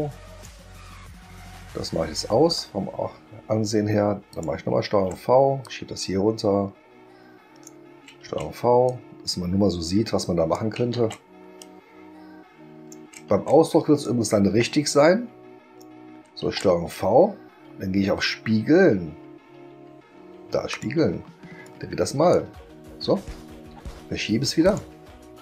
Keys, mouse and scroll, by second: 2.5 click, 4.3 click, 4.9 ctrl+v, 5.6-7.6 drag, 8.2 ctrl+v, 8.8-10.5 drag, 11.0 ctrl+v, 11.6-12.9 drag, 13.3 ctrl+v, 14.0-15.8 drag, 20.7 click, 21.6-22.3 drag, 24.6 click.